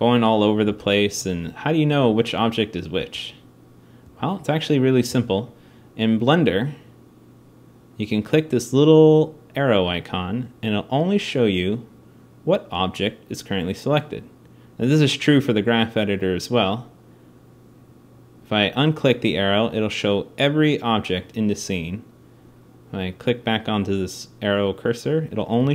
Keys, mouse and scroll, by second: 0.4 g, 1.7 g, 2.6-3.0 scroll, 3.8 g, 4.8 g, 6.0 click.